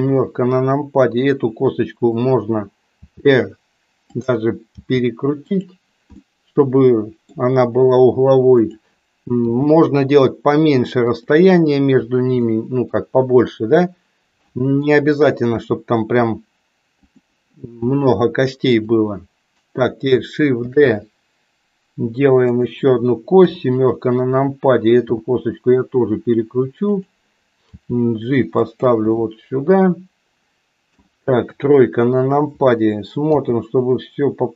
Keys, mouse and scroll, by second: 2.9 r, 4.7 g, 6.2-7.3 middle drag, 8.5 click, 9.4 g, 12.5 middle click, 15.6 r, 18.7 click, 20.6 shift+d, 23.4 KP_7, 25.1 r, 27.7 g, 29.2-31.2 middle drag, 31.5 KP_3, 33.2 g.